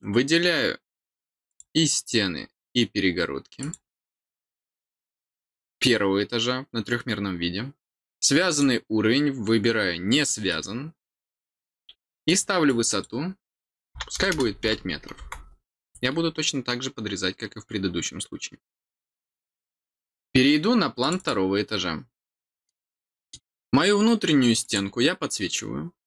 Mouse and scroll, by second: 1.4 click, 3.5 click, 8.4 click, 10.4 click, 12.2 click, 12.6 click, 20.9 click, 21.1 click, 22.1 middle click, 22.9 middle click, 24.6 click.